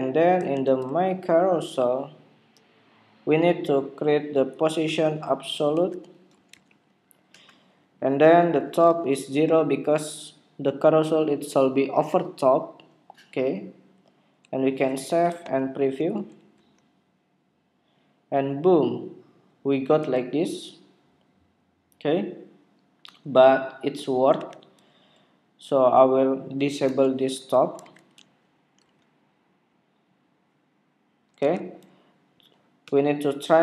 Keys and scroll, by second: 15.3 super+Tab, 17.6 super+r, 24.3 super+Tab, 27.6 super+s, 27.8 super+Tab, 28.8 super+r, 31.3 super+Tab.